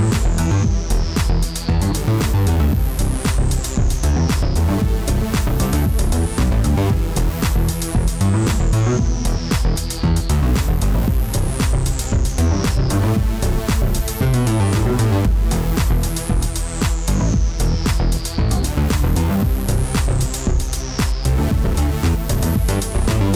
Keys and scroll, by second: 15.4 ctrl+shift+Left, 16.2-17.9 typing.